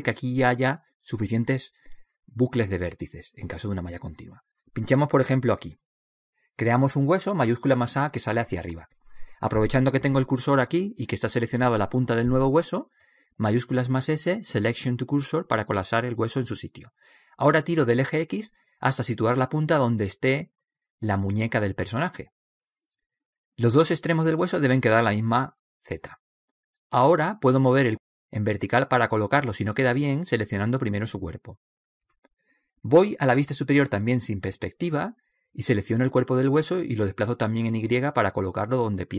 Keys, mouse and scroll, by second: 5.7 click, 7.7 shift+a, 8.5-12.3 middle drag, 13.5 shift+s, 15.6-17.9 middle drag, 17.9-19.5 drag, 24.4 right click, 28.6 click, 30.4 click, 33.7 KP_7, 35.7 click.